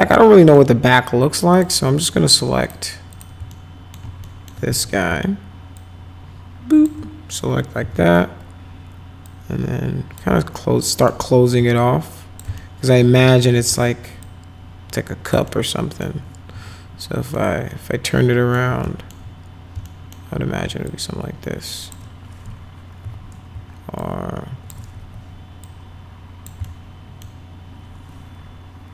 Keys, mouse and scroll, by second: 1.5 click, 2.6 click, 3.2 click, 3.5 alt+middle click, 4.2 alt+middle click, 4.7 w, 5.8-6.9 shift+drag, 7.8 r, 9.2 click, 10.4 alt+middle click, 11.8 shift+click, 12.6 alt+middle click, 13.0 w, 14.2-15.3 drag, 15.5 alt+middle click, 16.5 alt+q, 17.4-18.5 alt+middle drag, 18.9 alt+middle click, 19.8 alt+middle click, 20.9-22.0 shift+drag, 23.0 r, 24.0 shift+click, 25.0 w, 25.7 click, 26.6 alt+middle click.